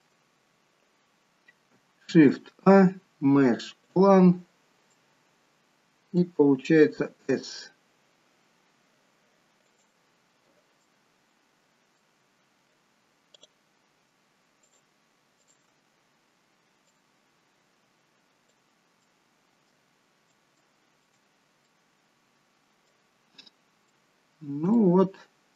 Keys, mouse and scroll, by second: 0.1 middle click, 0.1 scroll down 1, 2.0 shift+a, 4.4-4.9 scroll down 3, 4.9 middle click, 6.9 s, 10.7 middle click, 12.3-13.3 scroll up 3, 13.3 click, 13.3-13.8 scroll up 1, 14.6 shift+click, 15.3 shift+click, 16.8 click, 19.0 middle click, 20.5 shift+middle click, 20.5 scroll up 3, 21.3 scroll up 1, 21.6 middle click, 23.1-23.6 scroll down 5, 23.9 middle click, 24.7 shift+middle click.